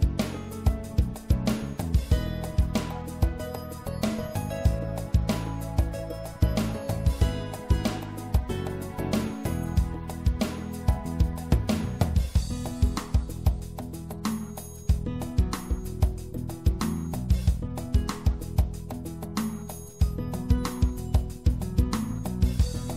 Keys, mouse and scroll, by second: 4.8-9.2 drag, 6.9 right click, 8.3 e, 9.2-11.3 drag, 11.5 click, 12.4 e, 14.3 click, 15.1 middle click, 19.4 middle click, 20.5 e, 21.6-22.9 drag.